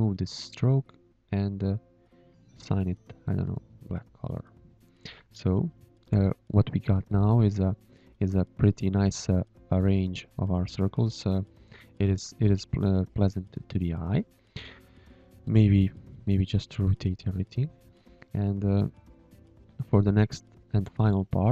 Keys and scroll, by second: 0.4 x, 1.4 x, 4.9 ctrl+h, 6.7 v, 7.2 z, 7.5 space, 8.5 space, 18.3 space, 19.6 ctrl+h, 20.7 ctrl+h.